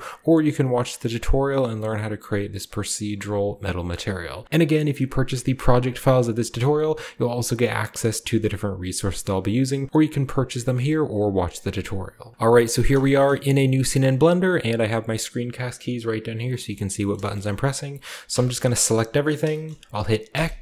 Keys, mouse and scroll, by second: 4.0-4.4 scroll up 1, 8.8-9.9 scroll down 2, 9.9-10.7 scroll down 1, 10.7 scroll down 1, 11.9-12.3 scroll up 2, 12.3 ctrl+b, 12.8 shift+middle drag, 13.1-13.7 middle drag, 13.8 middle click, 16.5 shift+middle click, 16.8 shift+middle drag, 17.1 shift+middle click, 17.3-18.4 shift+middle drag, 18.2 a, 18.4 a, 19.5-20.2 shift+scroll up 1, 19.6-20.6 shift+middle drag, 20.2-20.6 scroll up 1, 20.2 x.